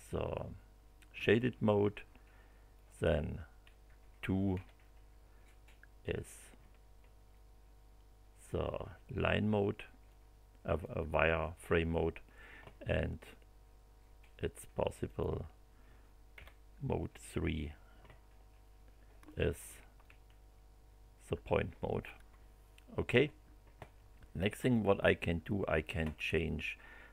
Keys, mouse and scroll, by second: 2.7 click, 4.5 2, 7.3-8.7 drag, 10.0 click, 15.0 click, 16.3 3, 18.6 middle click, 20.0-22.2 shift+right drag.